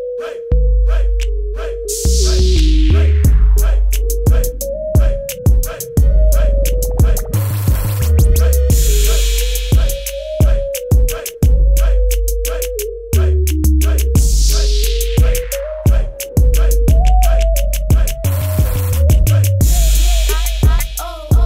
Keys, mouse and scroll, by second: 0.3 click, 0.5 z, 2.1 v, 2.7 click, 4.5 a, 4.9 click, 5.4 -, 5.5 click, 8.0 ctrl+z, 8.9 click, 10.3 click, 17.7 click, 21.0 KP_Enter.